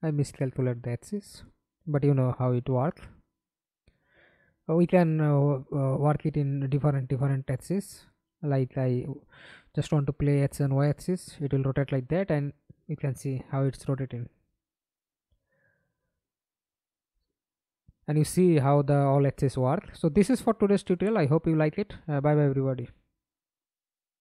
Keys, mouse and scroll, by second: 1.7 ctrl+c, 2.7 ctrl+v, 8.2 double click, 9.6 middle click, 10.4 F11, 10.8 alt+p, 15.8 w, 21.1 middle click, 23.9 alt+F9.